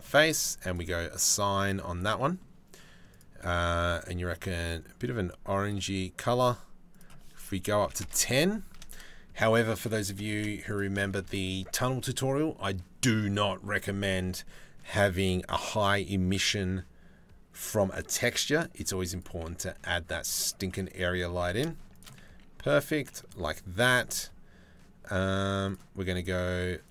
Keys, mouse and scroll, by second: 1.5 Tab, 1.8 click, 2.7 click, 6.6-7.6 drag, 9.9 shift+s, 10.7 shift+a, 20.9 g, 21.8 s.